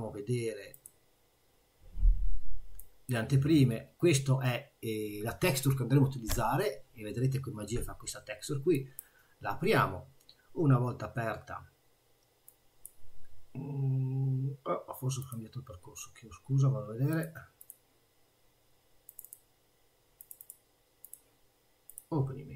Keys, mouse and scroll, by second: 12.5 click, 15.2 click.